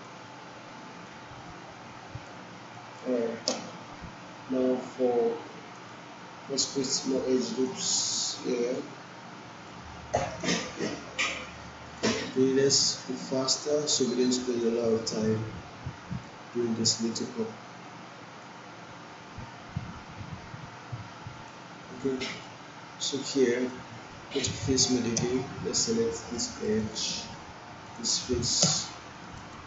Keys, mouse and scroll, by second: 1.3-2.3 drag, 2.7 alt+middle click, 6.2-9.7 drag, 17.1-21.5 drag, 22.1 alt+middle click, 23.6 right click, 25.1 space, 26.1 alt+middle click, 26.6 alt+right click, 26.9 alt+click, 27.8 click, 28.5 space, 29.2 alt+middle click, 29.5 alt+right click.